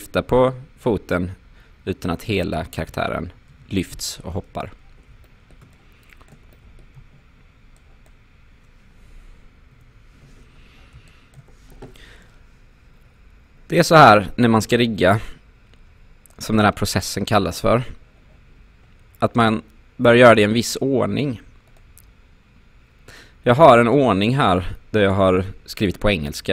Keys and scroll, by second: 3.5 ctrl+z, 9.8 Delete.